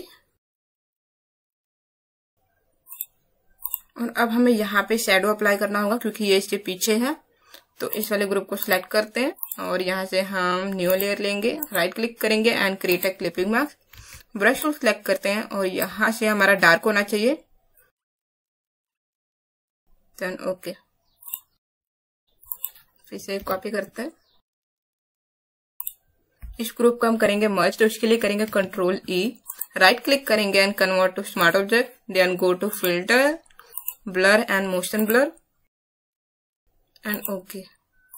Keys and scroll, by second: 14.0 b, 19.4 Right, 19.5 Right, 19.5 Right, 23.3 ctrl+j, 25.3 space, 28.4 ctrl+e.